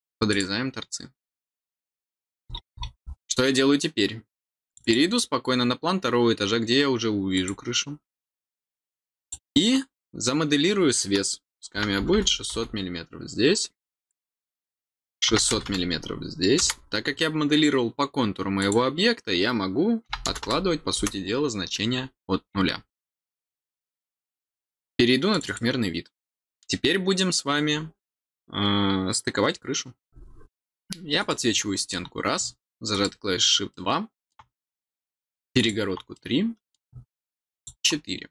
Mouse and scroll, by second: 0.2 click, 2.4-3.0 scroll down 3, 4.6 click, 7.3 click, 8.2 scroll up 1, 9.1 click, 14.0 click, 18.5 click, 25.2 click, 25.4 click, 31.1 click, 32.9 click, 33.6 middle click, 35.5 click, 36.1 middle click, 37.5 click.